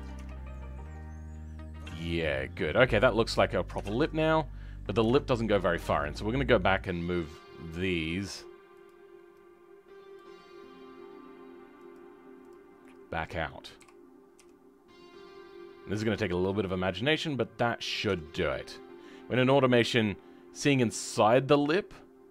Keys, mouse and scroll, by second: 0.5-3.8 right drag, 0.5 middle click, 5.1 right click, 5.1 middle click, 5.7 Tab, 6.1-8.8 right drag, 6.1 middle click, 8.8-12.8 drag, 12.8-13.8 right drag, 12.8 middle click, 13.8 g, 17.3 scroll down 2, 17.6 middle click, 18.0 Tab, 18.3 scroll down 2, 18.6 middle click, 19.5-20.0 scroll up 2, 20.0-22.3 middle drag.